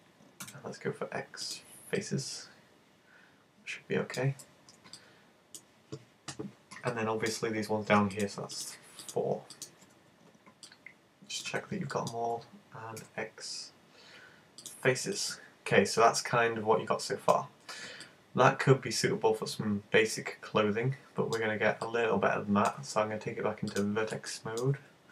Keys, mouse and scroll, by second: 0.4 x, 1.3 x, 2.0 middle click, 5.0 middle click, 6.9 middle click, 8.1 right click, 8.7 shift+right click, 9.1 right click, 9.5 shift+right click, 10.0 z, 10.7 middle click, 11.5 z, 12.0 middle click, 13.0 x, 15.1 middle click, 17.7-18.1 scroll down 3, 18.1 middle click, 21.9 middle click, 23.7 click, 24.4 middle click, 24.7-25.1 scroll up 9.